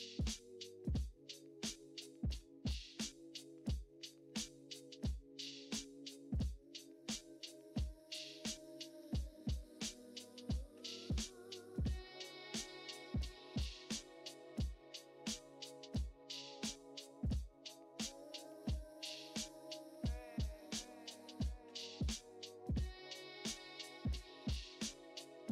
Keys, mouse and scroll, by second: 1.6 click, 2.1 scroll down 4, 2.3 click, 5.5 click, 6.7 click, 7.1 scroll down 16, 7.3-8.4 middle drag, 9.2 click, 9.5 middle click, 10.0 scroll up 4, 10.3 middle click, 10.9-11.4 scroll up 1, 11.4 middle click, 12.2 shift+a, 12.3-12.6 scroll up 4, 12.6 scroll down 9, 12.9-13.6 scroll up 5, 13.0 middle click, 13.3 shift+middle click, 13.6-14.9 middle drag, 14.9 ctrl+alt+KP_0, 15.5 middle click, 16.3 KP_0, 16.4-17.1 scroll up 1, 17.1 scroll down 1, 17.3-17.9 scroll up 1, 17.9 click, 18.7 click, 19.9 Tab, 20.2 click, 20.5 click, 20.9 s, 22.6 g, 23.4 click, 24.3 click.